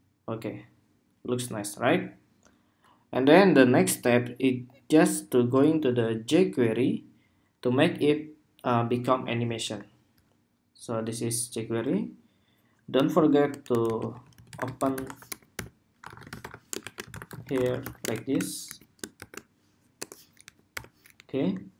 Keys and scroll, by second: 9.3 super+Tab.